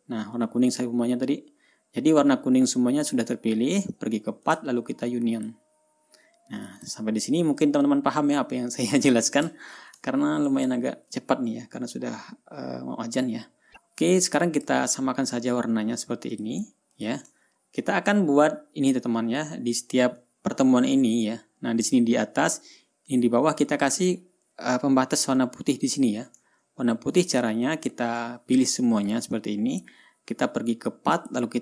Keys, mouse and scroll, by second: 0.0 click, 5.0 click, 5.9 click, 7.1 ctrl+click, 7.5 ctrl+scroll down 2, 10.6 ctrl+scroll down 2, 11.1 ctrl+scroll up 2, 11.3-12.1 ctrl+scroll down 2, 12.1-12.7 scroll down 1, 14.1-15.3 drag, 16.9 click, 17.5 click, 18.2-19.1 ctrl+scroll up 6, 19.5 ctrl+scroll down 2, 19.8 ctrl+scroll up 2, 19.9 ctrl+scroll down 2, 20.4 ctrl+scroll up 2, 21.2-23.3 scroll up 2, 24.6-25.5 ctrl+scroll up 2, 27.1-28.7 ctrl+scroll down 3, 28.7-29.8 drag.